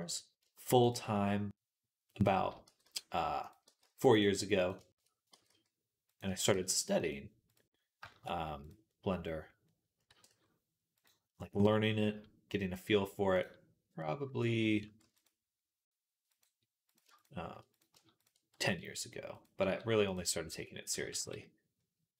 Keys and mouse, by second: 0.3 shift+middle click, 0.9-2.5 shift+middle drag, 2.5 g, 3.5-4.6 drag, 3.5 g, 4.6 shift+middle click, 4.9-7.8 drag, 6.1 e, 7.8 shift+middle click, 8.1-9.2 drag, 9.3-12.2 drag, 9.9 e, 14.8 ctrl+r, 17.0 shift+click, 18.4 e, 19.5 s, 20.8 x, 21.2 click, 22.0 click.